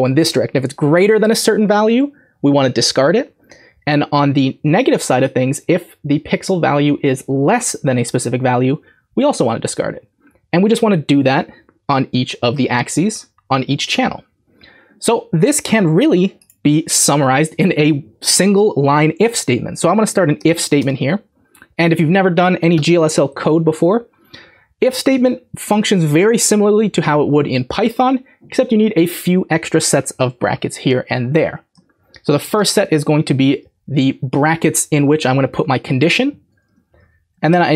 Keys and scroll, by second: 20.1-21.0 typing, 32.4-33.1 typing, 33.7 Left, 33.9 Left, 36.6 Right, 37.2-37.7 typing.